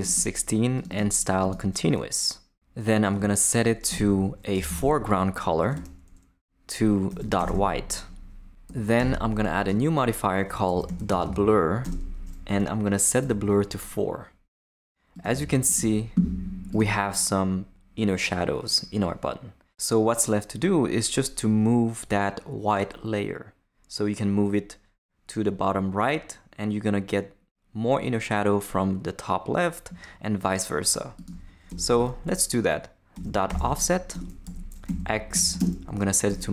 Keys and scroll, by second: 3.1 Return, 3.9-5.3 typing, 5.7 Return, 6.8-8.0 typing, 8.7 Right, 9.0 Return, 9.7-11.7 typing, 11.8 Return, 13.2 4, 15.3 Tab, 31.7 Return, 31.9 Tab, 32.9-36.5 typing, 34.1 Return, 34.4 Left.